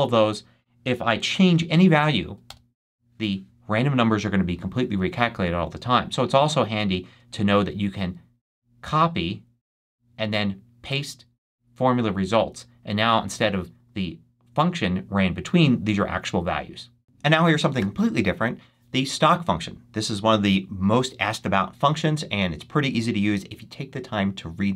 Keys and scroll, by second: 2.1 6, 2.4 Return, 4.6 BackSpace.